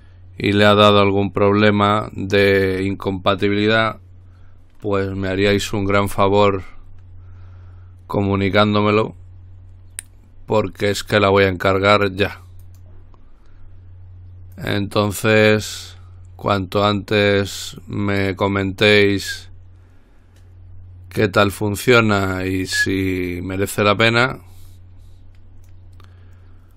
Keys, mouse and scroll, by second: 6.4-6.8 scroll up 2, 6.8-7.4 scroll down 2, 10.9 click, 12.9 click, 14.8-16.4 drag, 18.0-20.1 drag, 23.2 click, 24.2-26.4 drag.